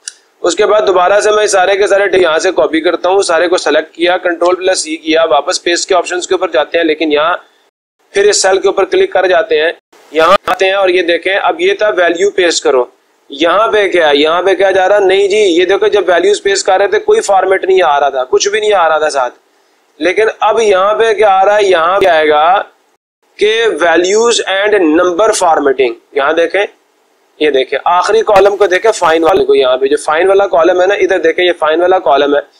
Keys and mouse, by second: 0.1 Escape, 3.6 click, 4.6 ctrl+c, 7.5-8.6 drag, 9.7 click.